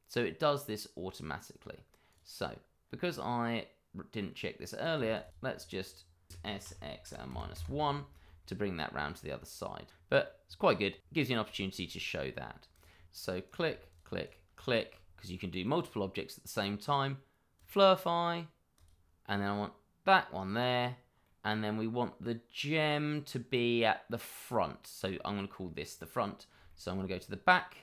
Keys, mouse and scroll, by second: 0.4 middle click, 2.1 click, 2.8-3.2 scroll up 1, 3.2 middle click, 4.7 click, 5.1 shift+click, 5.2 click, 5.5 middle click, 6.3 s, 6.6 x, 7.0 -, 7.3 1, 7.5 Return, 8.2 middle click, 10.5 click, 10.6 scroll down 1, 11.2 middle click, 12.5 scroll up 1, 12.9 middle click, 13.0 scroll up 1, 13.4 click, 13.9 shift+click, 14.2 click, 14.6 middle click, 15.1-17.1 scroll down 1, 17.5 click, 21.2-21.8 scroll down 1, 25.1 middle click.